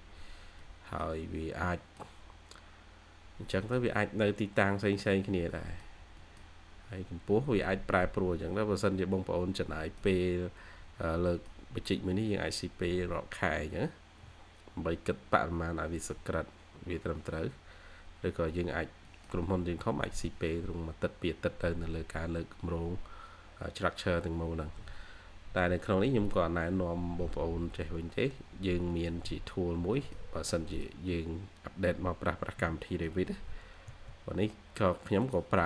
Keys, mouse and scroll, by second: 0.0-0.5 scroll down 1, 0.5 middle click, 2.3 scroll down 1, 2.5-3.0 scroll up 1, 3.1-3.5 scroll down 1, 3.5 middle click, 4.1 scroll up 1, 5.1 scroll down 1, 5.4 middle click, 5.5-6.1 scroll up 1, 6.1 middle click, 6.7 scroll up 1, 8.9 scroll down 1, 9.7 middle click, 11.0 scroll up 1, 11.2 middle click, 12.1 scroll down 1, 17.1 scroll up 1, 19.0 middle click, 20.4-20.8 scroll up 1, 23.9 scroll down 1, 27.3-28.1 scroll down 1, 28.1-28.8 scroll up 1, 28.8 middle click, 29.2-29.8 scroll up 1, 29.9 middle click, 31.3 scroll up 1, 32.5-33.1 typing, 34.2-34.5 scroll up 1, 34.2-35.0 typing, 35.5 scroll down 1, 35.6 scroll up 1.